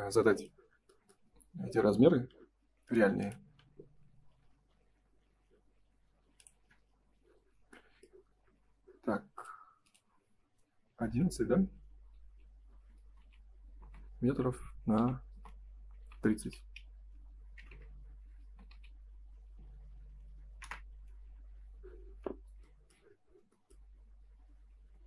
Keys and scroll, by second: 13.0 space, 13.1 v, 13.7 space, 15.2 space, 16.0 3, 17.5 0, 17.5 BackSpace, 18.6 v, 20.6 Return, 24.7 ctrl+s.